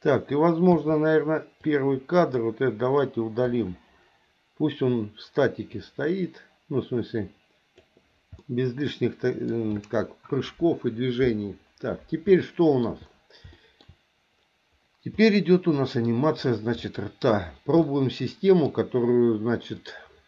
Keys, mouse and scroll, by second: 0.7 a, 1.6 click, 1.8 click, 3.5 Delete, 5.7-7.8 drag, 8.4-9.5 middle drag, 12.4 shift+middle click, 13.5 shift+middle click, 15.3 middle click, 16.8 shift+middle click, 17.8 middle click, 19.7 click.